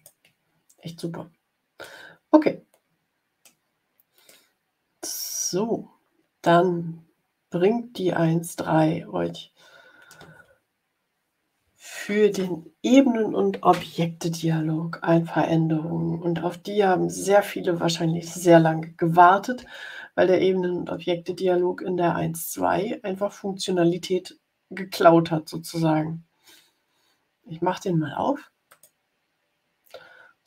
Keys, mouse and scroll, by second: 1.7-3.5 middle drag, 4.2-5.8 middle drag, 28.6 click.